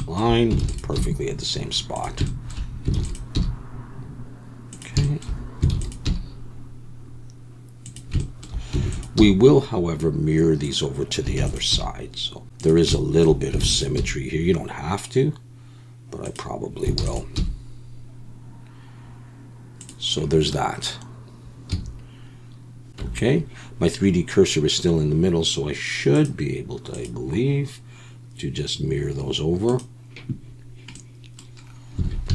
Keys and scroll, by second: 0.6 shift+d, 1.0 g, 3.0 shift+d, 3.3 g, 5.7 shift+d, 6.0 g, 8.8 shift+d, 9.2 g, 11.4 shift+d, 11.7 g, 13.6 shift+d, 14.0 g, 17.0 shift+d, 17.3 g, 21.7 a, 23.0 Tab, 32.0 alt+a.